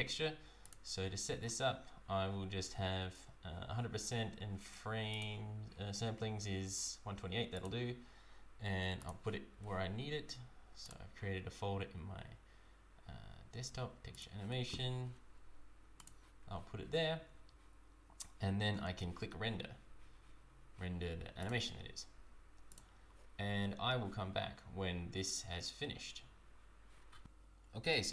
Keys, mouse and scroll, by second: 0.8 click, 1.6 scroll down 1, 5.2 click, 9.0 click, 16.1 click, 17.1-17.7 scroll down 1, 19.0 scroll down 2, 21.5 click.